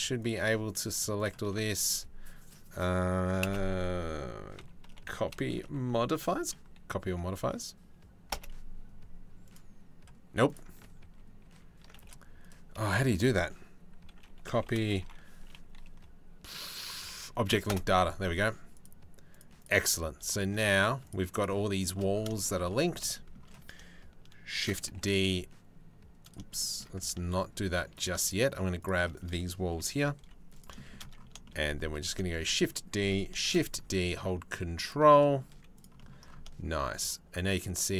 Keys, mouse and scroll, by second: 3.1 space, 9.1 click, 10.1 click, 10.8 ctrl+z, 11.2 ctrl+z, 11.6 space, 12.5 space, 19.0 click, 22.8 shift+middle click, 24.2 shift+d, 26.2 shift+middle click, 26.8 ctrl+z, 27.6 click, 27.9 shift+click, 28.4 shift+click, 29.4 KP_3, 29.8 z, 32.0 shift+f, 33.1 shift+d, 35.0 middle click, 35.2 z.